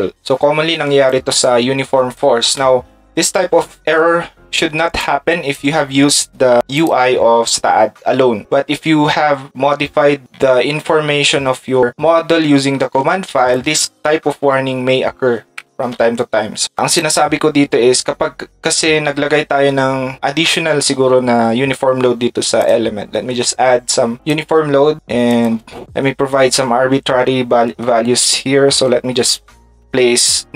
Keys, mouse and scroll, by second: 13.5 ctrl+shift+click, 16.9 click.